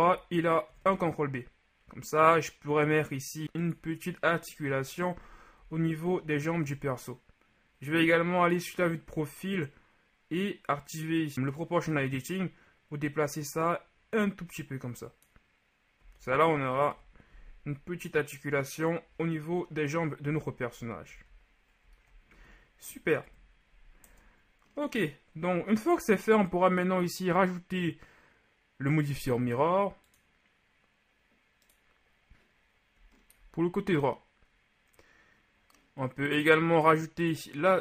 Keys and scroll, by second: 0.7 ctrl+alt+b, 4.7 KP_3, 5.6 z, 16.1 z, 16.9 KP_1, 21.1 z, 22.3 z, 23.3 KP_1, 24.1 Tab.